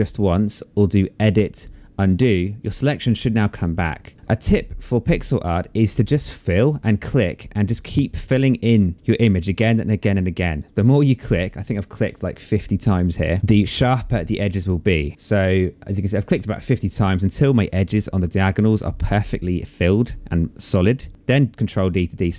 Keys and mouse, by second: 1.2 click, 6.1 click, 9.3 space, 9.4 click, 10.2 click, 12.7 click, 21.1 ctrl+d.